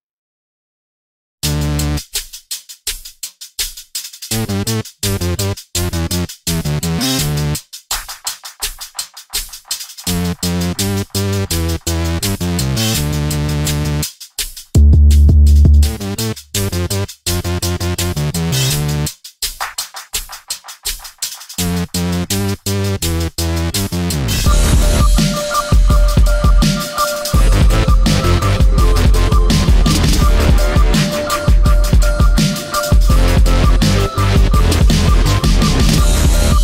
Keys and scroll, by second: 4.6 i, 5.0 v, 5.3 space, 20.0 ctrl+g, 20.6 ctrl+c, 21.8 ctrl+v, 30.8 Delete, 31.2 ctrl+z, 31.7 ctrl+shift+g, 33.2 Delete.